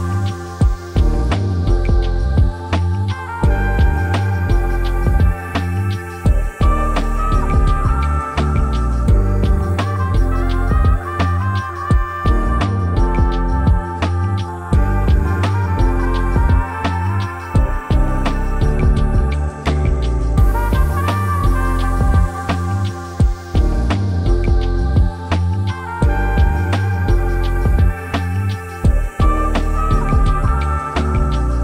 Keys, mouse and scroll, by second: 0.0-0.6 typing, 0.0 Tab, 4.9-5.5 typing, 9.3 typing, 9.4 Tab, 10.3 Return, 13.1-31.6 drag.